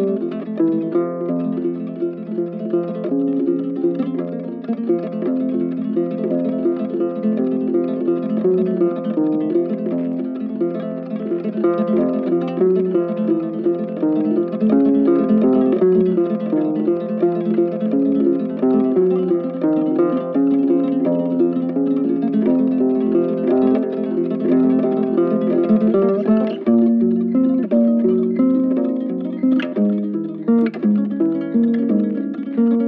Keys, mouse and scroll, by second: 11.5 right click, 15.6 ctrl+z, 16.2 ctrl+click, 26.9 ctrl+z.